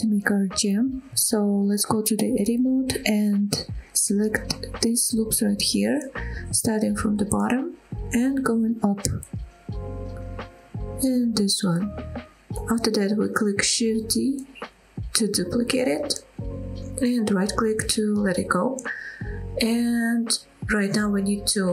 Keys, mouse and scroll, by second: 0.3-0.8 scroll up 2, 0.8 middle drag, 1.2 click, 2.4 Tab, 3.4 middle click, 4.4 middle click, 5.6 click, 6.0 click, 7.6 shift+click, 7.8 shift+click, 8.9 shift+click, 9.6 shift+click, 9.8 shift+click, 10.2 middle click, 10.8 shift+click, 11.0 shift+click, 14.8 shift+d, 17.2-18.3 right drag, 19.6 middle click, 20.6 middle click.